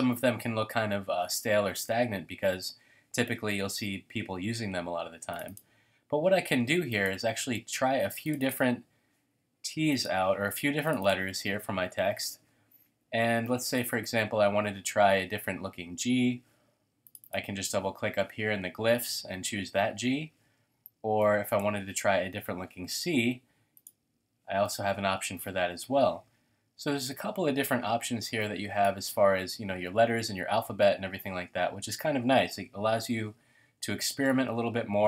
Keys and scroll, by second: 5.6 typing, 34.1 shift+super+a.